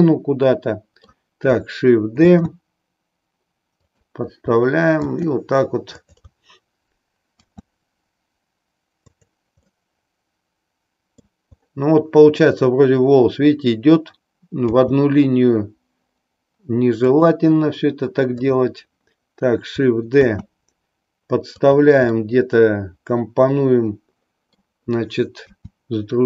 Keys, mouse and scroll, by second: 2.2 shift+d, 9.1 click, 9.7-11.4 middle drag, 14.6 g, 17.1 click, 18.5 click, 20.2 shift+d, 21.7 click, 22.1-24.6 middle drag, 25.5 r.